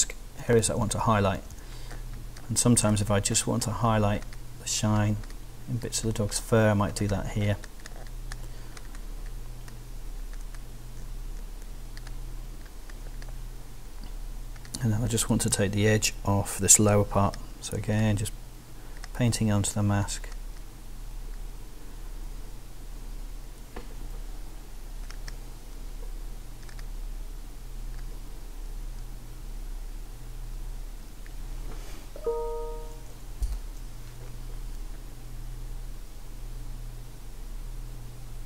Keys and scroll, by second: 1.0 ], 1.2 [, 15.5 ].